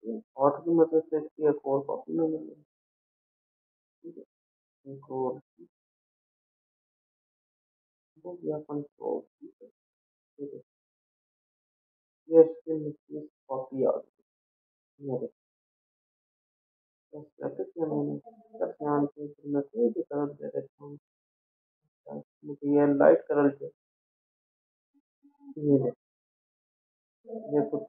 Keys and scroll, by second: 6.5 ctrl+f, 9.0 ctrl+z, 10.3 ctrl+d, 14.0 ctrl+z.